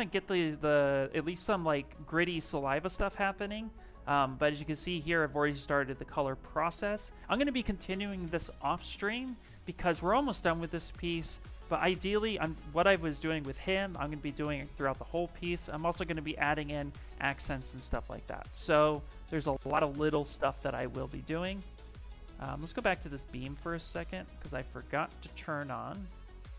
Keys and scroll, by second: 22.8 space, 25.7 space.